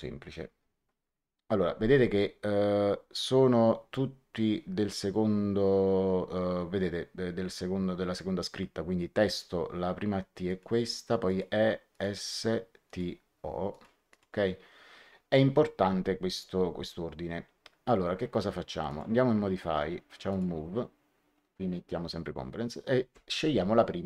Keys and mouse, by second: 10.4 click, 18.8 click, 20.2 click.